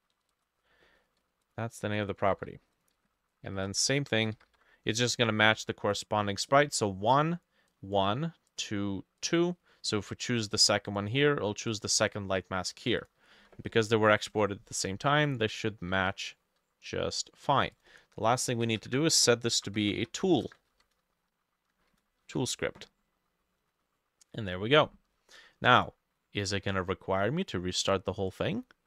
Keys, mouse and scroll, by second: 0.0-0.3 typing, 2.3 ctrl+middle click, 2.4 ctrl+c, 3.2 ctrl+v, 3.6-5.1 typing, 13.4 ctrl+s, 15.9 ctrl+middle click, 16.0 ctrl+s, 18.6 Left, 18.7 Return, 18.9 Up, 19.4-20.5 typing, 20.6-24.3 ctrl+drag, 20.6 ctrl+middle click, 20.7 ctrl+Left, 21.8 shift+middle click, 22.0 shift+2, 22.3 ctrl+s, 28.3-28.8 drag.